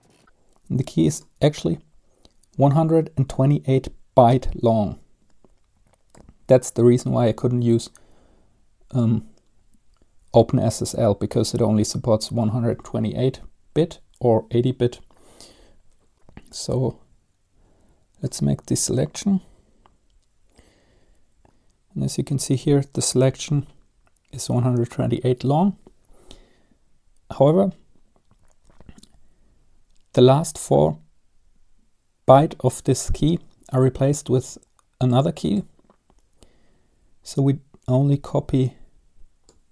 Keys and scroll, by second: 21.5 Up, 21.5 Return.